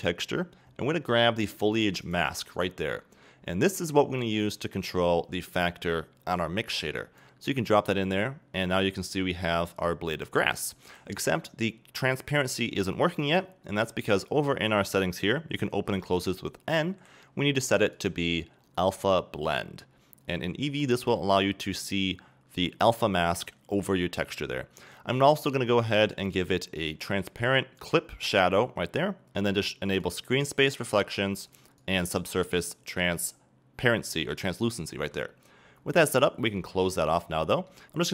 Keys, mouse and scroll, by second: 2.1 click, 4.2-9.2 drag, 9.0 scroll up 1, 9.2-20.1 middle drag, 20.1-21.1 drag, 21.1-27.8 middle drag, 27.8-37.1 drag, 37.1 scroll down 2, 37.4-38.1 middle drag.